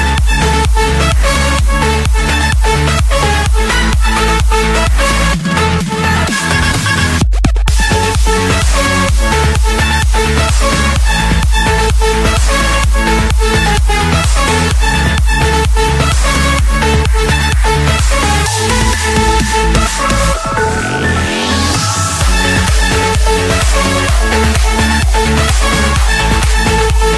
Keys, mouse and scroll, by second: 0.2 click, 0.5 middle click, 0.5-1.0 scroll, 1.0 click, 2.9 m, 3.7 Return, 5.7 click, 7.2-8.4 drag, 8.7 Escape, 9.6 c, 10.2 Return, 12.1-13.3 drag, 13.3-14.4 middle drag, 16.7 typing, 17.7 Return, 18.7 Return, 20.6 click, 22.1-22.6 typing, 23.2 Return, 25.1-25.7 scroll up 1, 25.7-26.1 scroll up 1, 26.6 middle click.